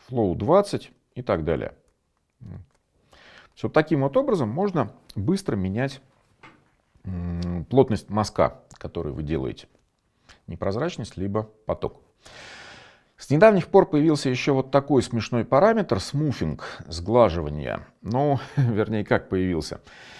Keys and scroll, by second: 2.1 shift+7.